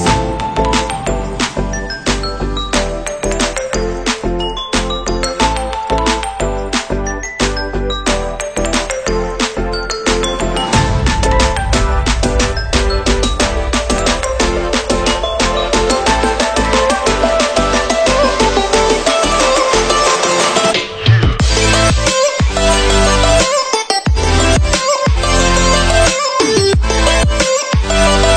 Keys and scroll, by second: 2.9 p, 8.0 p, 11.7 p, 17.1 p, 20.1 p, 25.4 ctrl+z, 27.3 ctrl+z.